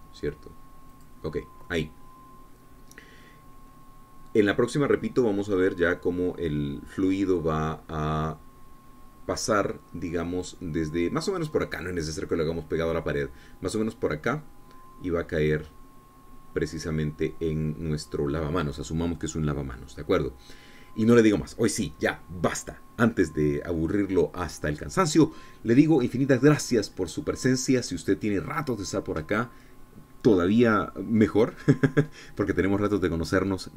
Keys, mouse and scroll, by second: 0.2 g, 0.4 click, 2.6-18.8 drag, 21.3-21.7 scroll down 2, 21.7-33.7 drag.